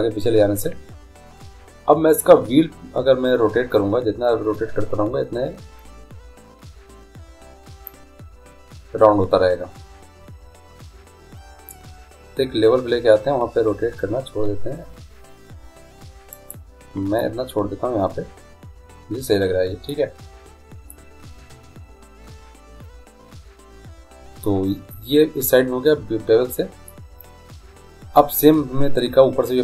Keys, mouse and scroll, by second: 17.2-19.0 middle drag, 20.9 middle click.